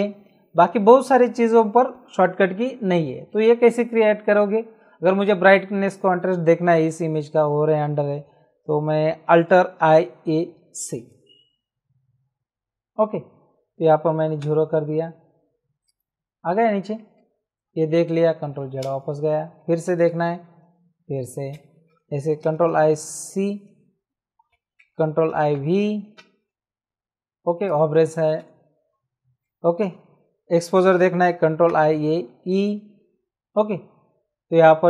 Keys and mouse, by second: 5.2 click, 9.7 alt+i, 10.2 alt+a, 10.7 alt+c, 14.4 KP_0, 15.8 click, 16.9 Return, 16.9 KP_Enter, 18.8 ctrl+z, 19.8 alt+i, 20.1 alt+a, 20.4 alt+c, 21.5 Escape, 22.4 alt+i, 22.7 alt+a, 23.5 alt+c, 24.5 Escape, 25.3 alt+i, 25.5 alt+a, 26.1 alt+v, 27.6 click, 28.3 Escape, 31.7 alt+i, 31.9 alt+a, 32.4 alt+e.